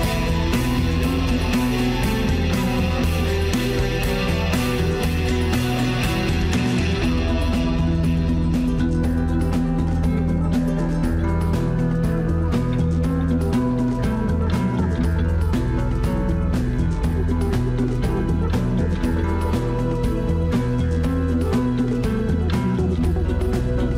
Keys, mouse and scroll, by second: 4.5-5.9 scroll up 1, 5.9-8.2 drag, 8.8-9.4 scroll down 1, 9.4-10.9 middle drag, 10.9 scroll up 1, 11.1-12.2 shift+middle drag, 12.2 ctrl+r, 13.8 ctrl+b, 16.4-17.9 drag, 18.2 scroll down 1, 18.5-19.8 middle drag, 19.8 scroll up 1, 20.0-21.2 middle drag, 21.2 ctrl+r, 22.8 ctrl+b.